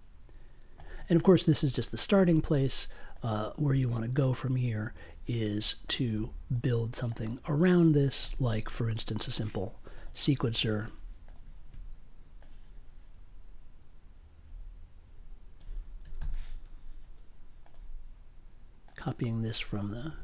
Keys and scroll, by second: 16.1 super+c, 20.0 super+v.